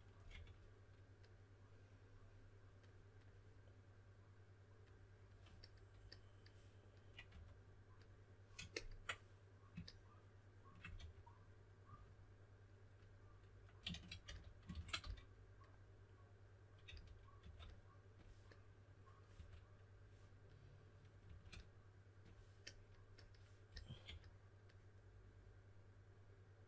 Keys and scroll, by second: 0.0-0.8 typing, 7.3 3, 10.9 4, 14.2 s, 15.0 s, 16.8-17.9 typing, 19.3 2, 21.2 typing, 23.4-24.5 typing.